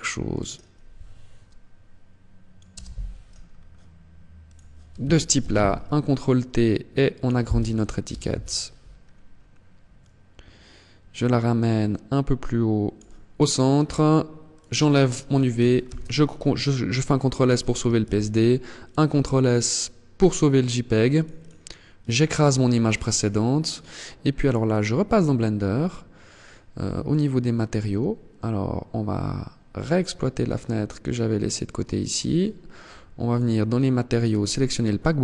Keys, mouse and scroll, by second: 30.0 click.